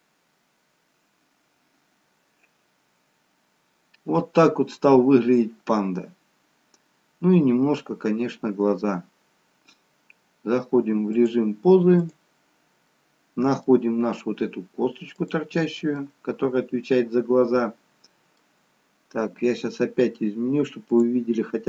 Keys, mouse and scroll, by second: 11.2 click, 13.0 middle click, 15.3 click, 17.2 middle click, 18.9 scroll up 2, 21.0 click.